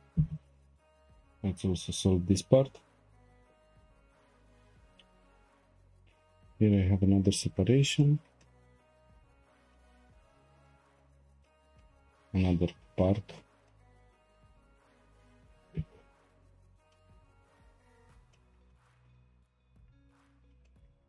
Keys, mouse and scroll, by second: 0.3 click, 0.9 shift+click, 1.9 click, 3.5 g, 5.3 3, 5.6 click, 6.0 shift+click, 7.1 shift+click, 7.5 shift+click, 8.0-9.4 shift+middle drag, 9.4-9.7 scroll down 1, 9.7-11.1 shift+middle drag, 11.1-11.4 scroll up 2, 11.4 shift+middle click, 12.4-13.3 scroll up 2, 13.3-13.7 scroll down 2, 13.7-14.0 shift+middle drag, 14.0 scroll down 1, 14.3-15.9 shift+middle drag, 15.9 p, 16.9-17.4 shift+middle drag, 17.4 Tab, 17.8-18.3 scroll down 3, 18.3-19.3 shift+middle drag, 19.3-19.9 scroll up 2, 19.9 scroll up 1, 20.1-21.0 scroll down 5, 20.7-21.0 shift+middle drag.